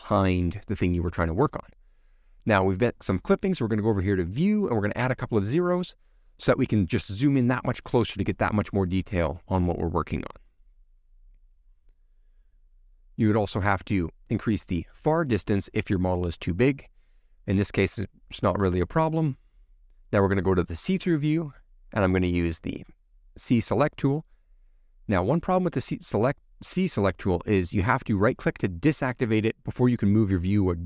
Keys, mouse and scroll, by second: 8.6 0, 10.1 scroll up 1, 14.0-16.6 drag, 16.6-18.5 scroll down 1, 20.6 c, 29.5 x, 30.3-30.8 middle drag.